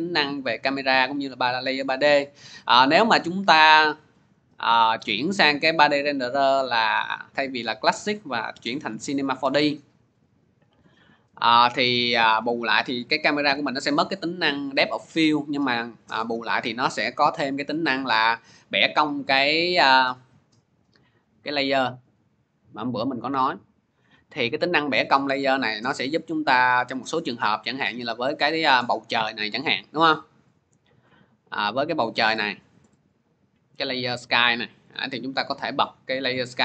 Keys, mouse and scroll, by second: 2.9 click, 3.7 click, 5.1 click, 6.2 click, 8.9 click, 10.0 click, 14.0-15.0 drag, 27.4-29.7 middle drag, 27.4 scroll, 29.7 scroll, 29.8 click, 30.5 click, 31.5-32.2 scroll, 32.7-33.5 scroll, 33.7 click, 34.8 click.